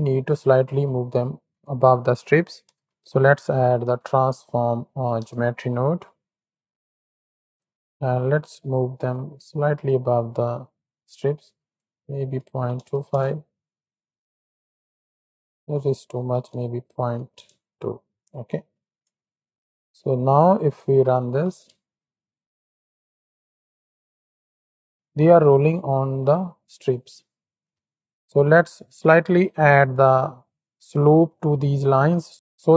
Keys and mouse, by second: 0.5 shift+a, 6.9 click, 9.2-11.7 shift+drag, 12.0-13.1 drag, 14.0-14.9 drag, 15.8-17.4 drag, 18.4 click, 19.2 shift+middle click, 19.8 middle click, 21.2 shift+Right, 21.3 shift+Left, 21.7 space, 24.9 middle click, 24.9 ctrl+KP_3, 24.9 KP_1, 28.1 space, 29.6 click.